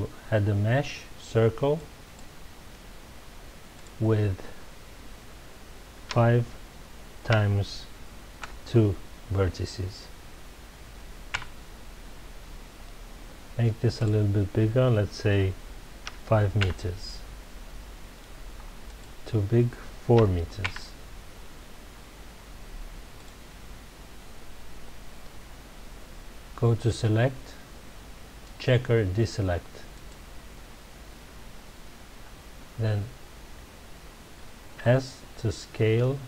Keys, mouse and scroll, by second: 3.7-6.8 drag, 11.4 KP_Enter, 14.0-16.6 drag, 16.6 KP_Enter, 18.8-20.7 drag, 20.7 KP_Enter, 23.2 drag, 24.4-25.3 scroll down 2, 26.9-29.9 drag, 34.8 s.